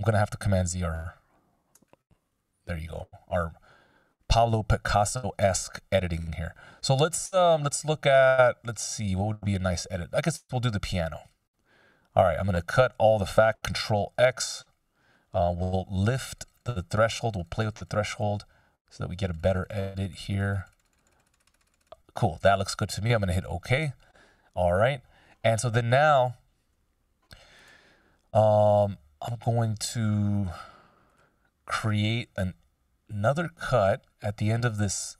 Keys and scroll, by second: 13.9 ctrl+x.